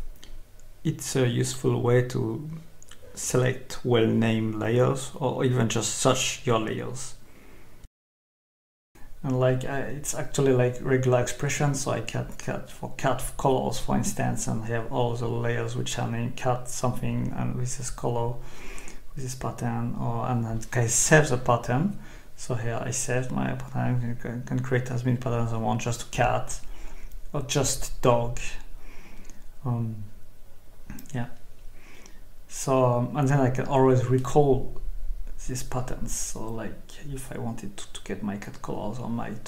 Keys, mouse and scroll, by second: 1.3-1.9 scroll up 2, 2.1 scroll up 2, 2.7-3.6 scroll up 2, 4.0-4.6 scroll up 2, 7.2 click, 11.4 click, 12.5-15.6 typing, 17.0 Escape, 18.5-19.6 scroll down 2, 19.9-20.6 scroll down 2, 21.0-21.8 scroll down 2, 21.8-22.9 scroll up 2, 24.7 click, 26.8 click, 28.8 click, 29.2-30.6 typing, 31.2 click, 32.4 click, 33.2-34.5 typing, 35.4 click, 38.9 click.